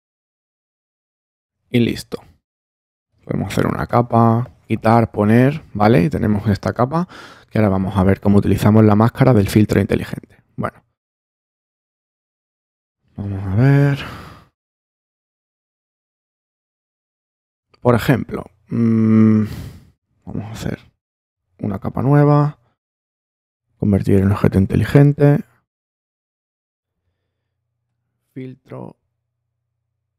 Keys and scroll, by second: 5.0 super+z, 12.2 super+-, 12.9 super+space, 14.6 super+space, 15.5 space, 20.5 super+j.